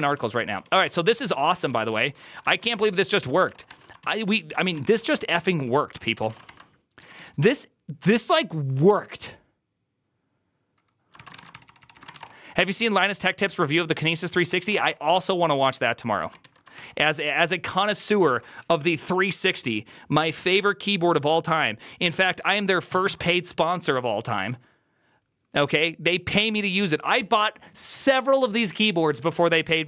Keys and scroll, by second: 0.0 ctrl+u, 0.2 ctrl+u, 0.8 ctrl+u, 1.1 ctrl+c, 1.2 ctrl+c, 1.5 ctrl+c, 1.5-7.8 typing, 1.6 Return, 1.8 ctrl+d, 1.9 ctrl+d, 3.1 ctrl+c, 3.5 Return, 3.5 ctrl+d, 3.9 ctrl+u, 5.3 ctrl+c, 5.9 ctrl+c, 6.1 ctrl+:, 6.3 Return, 6.3 ctrl+d, 10.9-12.5 typing, 14.3 ctrl+c, 14.3-14.7 typing, 16.1 ctrl+a, 16.3 2, 16.6 ctrl+c, 16.7 ctrl+c, 24.3 alt++.